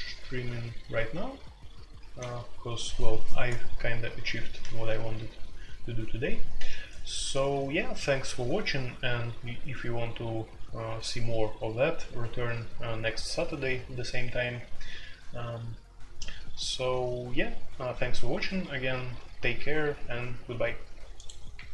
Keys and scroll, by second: 2.0 typing.